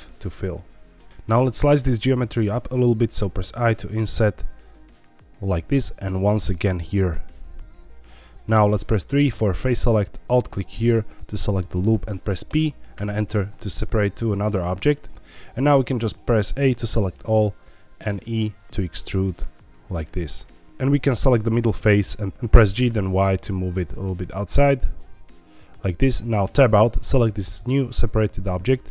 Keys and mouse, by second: 0.5 middle click, 5.4 click, 5.7 i, 8.0 click, 9.3 3, 10.8 middle click, 12.4 p, 15.9 a, 17.0 middle click, 18.0 e, 21.3 click, 22.3 ctrl+z, 22.3 y, 22.6 g, 22.8 y, 26.1 click, 26.4 Tab.